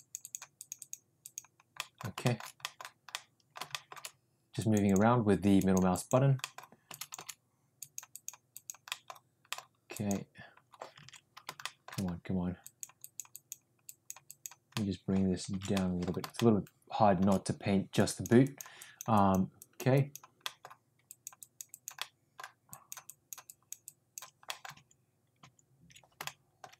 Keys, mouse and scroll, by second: 0.2 click, 0.6 click, 0.7 click, 1.2 click, 1.7 middle click, 2.2 shift+middle click, 2.6 middle click, 3.1 middle click, 3.7 shift+middle click, 4.5 click, 4.9 click, 5.5 click, 5.9 click, 6.4 middle click, 7.7 click, 8.1 click, 8.5 click, 8.9 middle click, 9.4 middle click, 9.8 click, 11.3 ctrl+z, 11.6 middle click, 12.6 click, 13.0 click, 13.3 click, 13.8 click, 14.3 click, 14.7 middle click, 15.8 ctrl+z, 15.8 middle click, 16.4 shift+middle click, 17.9 click, 18.4 click, 18.8 click, 19.1 click, 19.6 click, 19.9 click, 20.4 middle click, 21.0 click, 21.4 click, 21.7 click, 22.0 middle click, 22.7 click, 23.0 click, 23.5 click, 23.8 click, 24.5 middle click, 25.0 ctrl+z, 25.9 ctrl+z, 26.2 shift+middle click.